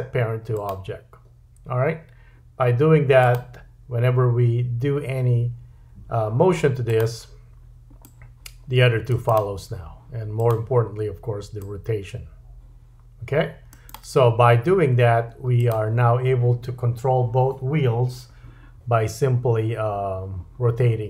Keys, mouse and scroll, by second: 3.2 click, 6.9-9.4 drag, 10.3-13.9 drag, 15.6-21.0 drag.